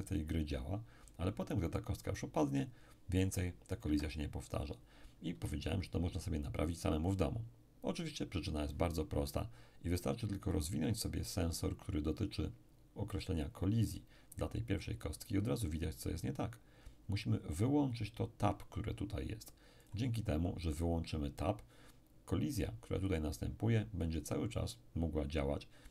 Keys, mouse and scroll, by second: 3.9 Escape, 10.5-12.0 drag, 19.8-20.8 drag.